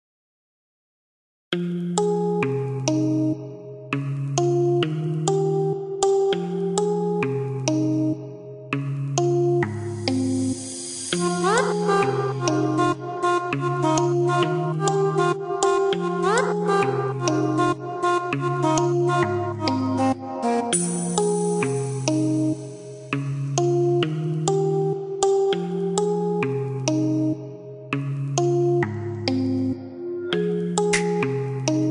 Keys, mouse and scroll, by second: 0.9 click, 1.6 click, 2.3 KP_1, 2.5 KP_2, 2.8 KP_Decimal, 3.1 KP_5, 3.4 KP_Enter, 4.0 Escape, 5.3 click, 10.4 click, 12.4 click, 13.1 KP_1, 13.3 KP_9, 13.6 KP_Enter, 14.3 Escape, 14.7 click, 16.4 click, 18.1 ctrl+click, 19.2 click, 22.5 click, 24.9 click, 27.5 click, 29.3 click, 30.9 click.